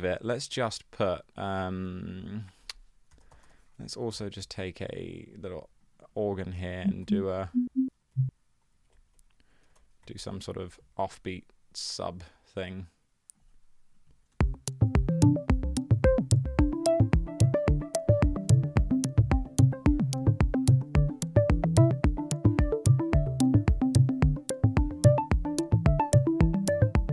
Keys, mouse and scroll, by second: 2.9-4.4 typing, 4.2 Return, 7.1 Up, 7.2 Up, 7.4 Up, 7.5 Up, 7.7 Up, 8.1 shift+Down, 8.7 Right, 9.2 Right, 9.5 Right, 9.9 super+d, 10.1 Right, 10.2 super+d, 10.2 Right, 10.4 Right, 14.4 space.